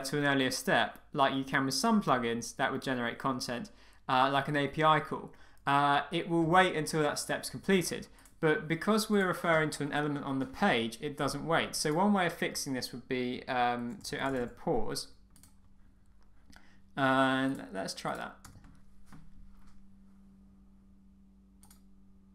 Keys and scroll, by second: 18.4 Return.